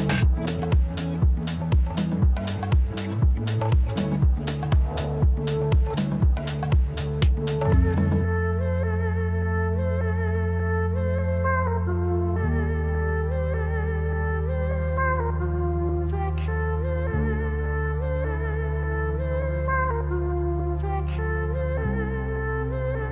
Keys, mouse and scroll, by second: 0.4 ctrl+b, 7.5 Tab, 8.1-8.4 scroll down 1, 8.4-11.0 middle drag, 11.0-11.7 scroll up 1, 11.7 Tab, 13.4 ctrl+r, 20.3 Tab, 21.0-23.0 middle drag, 23.0 Tab.